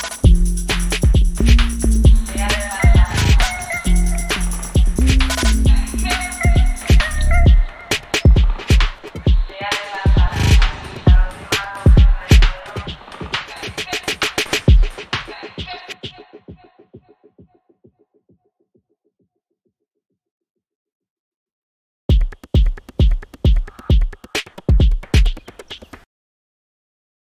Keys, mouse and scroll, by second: 4.3-8.3 drag, 11.7 click, 12.7 ctrl+d, 14.0 click, 17.0-18.5 drag, 18.5-20.1 drag.